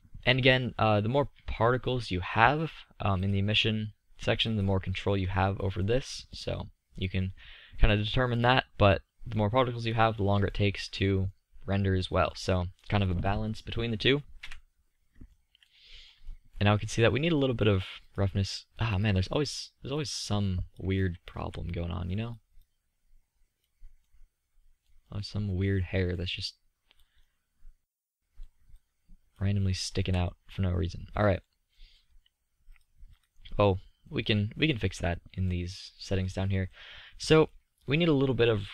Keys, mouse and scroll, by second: 3.0 middle click, 4.7-6.0 middle drag, 9.6-12.6 middle drag, 14.1 KP_3, 19.1 click, 21.1 z, 23.8-24.1 middle drag, 26.2-27.4 drag, 29.6 z, 33.9-38.4 drag.